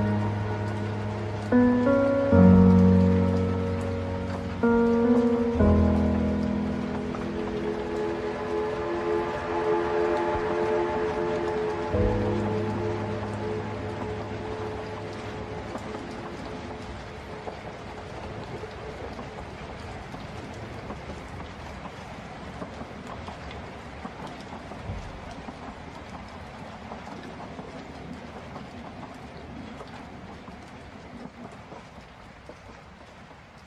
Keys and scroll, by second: 0.1 ctrl+z, 23.1 ctrl+alt+space, 24.8 ctrl+space, 30.1 ctrl+alt+space, 31.1 ctrl+z.